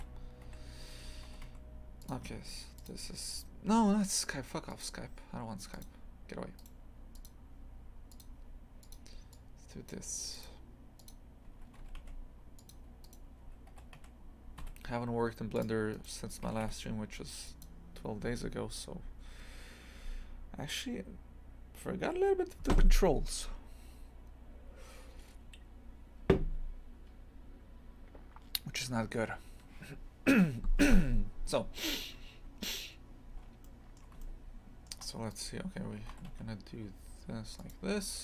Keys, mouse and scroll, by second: 1.2 g, 10.3-11.8 drag, 11.8 g, 13.0 right click, 13.7 g, 15.9 right click, 16.4 g, 31.6-32.3 scroll up 1, 32.3-32.7 scroll up 1, 32.7-33.4 scroll down 1, 33.6 alt+middle click, 34.2-35.3 shift+middle drag, 35.3 right click, 36.1 g.